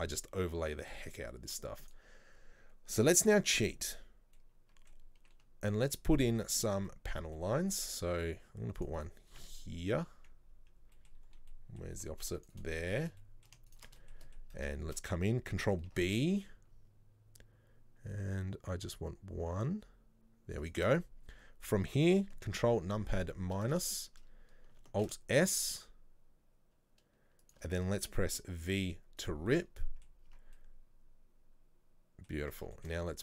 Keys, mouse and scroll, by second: 2.0 click, 4.5-7.8 middle drag, 7.8 ctrl+r, 9.7-11.2 middle drag, 11.2-11.6 scroll down 1, 11.6 middle click, 12.2 ctrl+r, 13.3 middle click, 13.8 alt+shift+right click, 14.1 middle click, 14.6 scroll up 1, 14.8 shift+middle click, 15.0-16.0 scroll down 1, 16.0 ctrl+b, 22.7 ctrl+KP_Subtract, 24.0 shift+middle click, 24.3 scroll up 1, 25.1 alt+s, 28.2-28.6 scroll down 4, 28.6 v, 29.6 middle click, 30.4 Tab, 30.7-32.5 middle drag, 32.5 Tab, 32.8 shift+middle click.